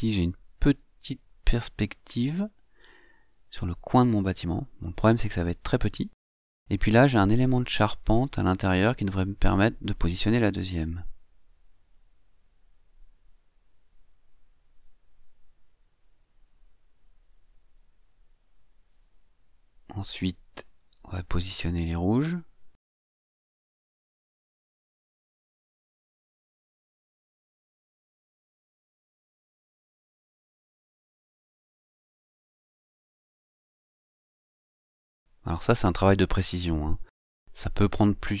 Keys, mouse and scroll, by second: 0.6-3.7 drag, 3.8-6.0 drag, 6.7-8.1 scroll up 2, 8.1-10.4 drag, 11.5-14.0 drag, 14.9-19.2 drag, 20.9-23.5 drag, 24.2 click, 25.1-27.4 drag, 28.0-29.9 drag, 30.7-32.3 drag, 33.1-34.1 drag, 34.9-38.2 drag.